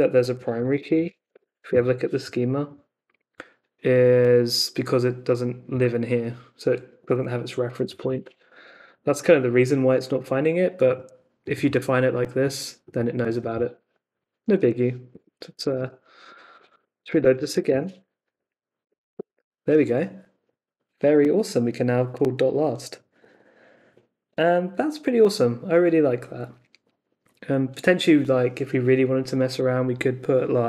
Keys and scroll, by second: 0.5-1.9 typing, 14.5 super+Tab, 16.3-18.0 typing, 18.2 Up, 18.8 Return.